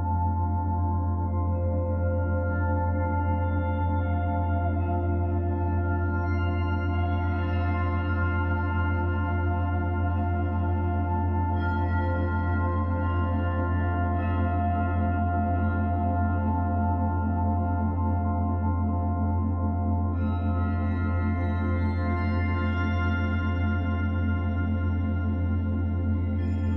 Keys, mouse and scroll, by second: 0.2-0.5 scroll up 5, 0.5-1.0 middle drag, 1.0 click, 1.3 Tab, 1.7 3, 1.8 click, 2.2 shift+click, 3.3 ctrl+KP_Add, 3.5 ctrl+KP_Add, 4.5 s, 6.6 middle click, 7.2-7.9 scroll up 1, 7.9 click, 8.6 ctrl+z, 9.3 ctrl+z, 9.7 ctrl+z, 10.3-12.5 middle drag, 12.5 2, 12.8 click, 13.5 alt+shift+click, 13.7 alt+shift+click, 14.1 alt+shift+click, 14.5 middle click, 14.9 Delete, 15.1 Delete, 16.1 middle click, 17.1 3, 17.2 click, 17.6 shift+click, 18.3 shift+click, 18.5 shift+click, 19.1 shift+click, 19.4 middle click, 19.7 Delete, 21.0 2, 21.3 click, 21.6 alt+shift+click, 21.8 alt+shift+click, 22.4 scroll up 2, 23.0-24.3 middle drag, 24.3 shift+d, 24.6 s, 25.5-26.7 middle drag.